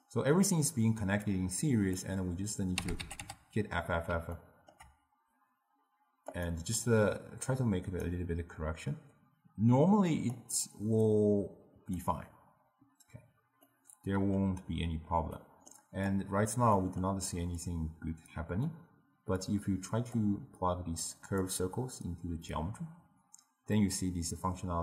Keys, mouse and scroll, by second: 1.4-2.9 drag, 2.9 f, 3.1 f, 3.3 f, 4.4-6.4 ctrl+middle drag, 6.4 click, 7.0 click, 9.1 click, 11.2-13.8 drag, 13.8-16.2 middle drag, 16.2 click, 16.9-17.7 middle drag, 17.7-21.2 drag, 23.9-24.8 middle drag.